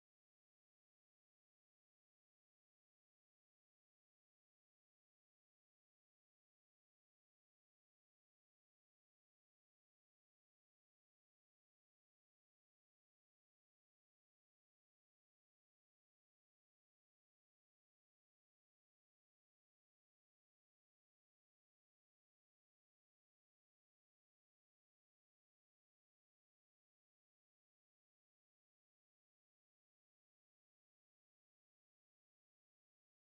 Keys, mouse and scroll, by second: 1.9 ctrl+j, 2.6 ctrl+z, 3.4 click, 4.2 click, 5.7 click, 6.4 click, 7.2 click, 7.4 click, 9.0 click, 9.7-10.8 click, 10.5 click, 10.7 click, 11.6 click, 12.2 click, 12.4 click, 13.2 click, 13.9 click, 14.1 click, 14.5-15.3 scroll down 7, 15.3 click, 15.7 b, 17.3 ctrl+j, 18.0 Tab, 18.5 Tab, 19.7 click, 20.7 scroll up 3, 21.5 click, 24.8 click, 25.6 click, 26.9 click, 30.0 click, 30.4 middle click, 32.6 scroll down 3.